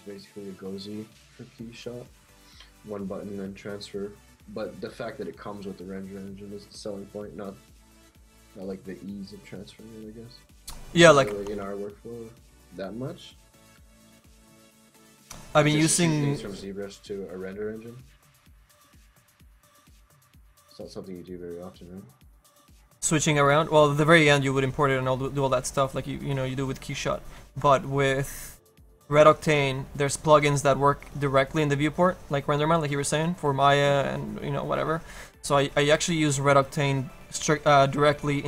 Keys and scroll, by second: 22.4 ctrl+z.